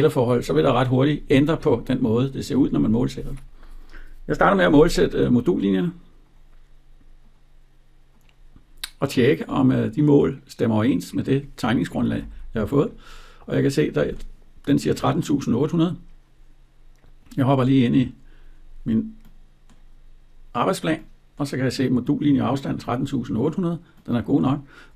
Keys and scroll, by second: 11.9 Escape.